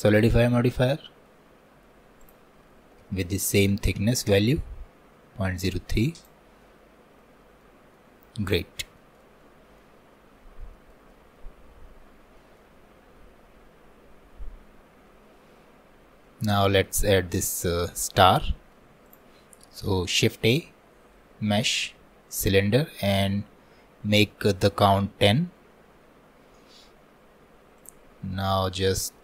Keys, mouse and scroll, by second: 0.0 click, 0.4-2.3 middle drag, 2.3-6.7 drag, 6.7 middle click, 7.4 scroll down 2, 7.6 middle click, 8.2-9.0 scroll down 1, 9.0-10.8 shift+middle drag, 11.1 alt+middle click, 11.9-12.4 scroll up 1, 12.4-15.5 shift+middle drag, 15.8 scroll down 1, 16.3-19.1 shift+middle drag, 19.1-20.3 drag, 20.3 shift+a, 27.8 click, 28.5-29.2 middle drag.